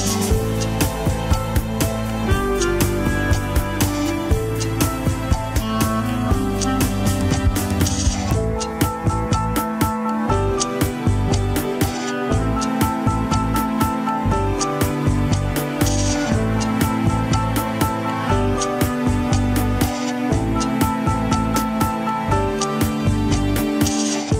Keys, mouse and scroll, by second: 0.0 click, 0.4 click, 0.7 scroll down 4, 0.9-2.2 middle drag, 2.2 click, 6.4 click, 7.5 KP_3, 7.8 click, 8.3 ctrl+Tab, 10.0 scroll up 3, 10.5 ctrl+Tab, 10.5 click, 13.1-15.9 drag, 16.1 scroll up 2, 16.7 click, 17.0 ctrl+Tab, 17.7 ctrl+Tab, 18.3 click, 18.8 shift+middle click, 19.0 scroll up 1, 19.3 ctrl+Tab, 19.5 click, 20.2 g, 22.1 shift+z, 23.6 shift+z.